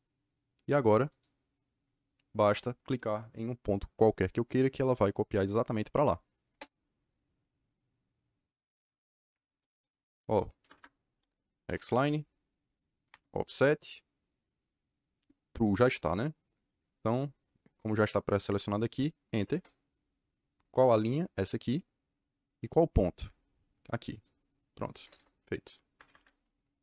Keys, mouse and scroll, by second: 1.0 click, 6.4 KP_Enter, 10.5 Escape, 10.7 Escape, 11.3-13.0 typing, 13.0 Return, 19.5 KP_Enter, 21.3 click, 24.0 click, 25.1 KP_Enter, 25.8 Escape, 26.0 Escape.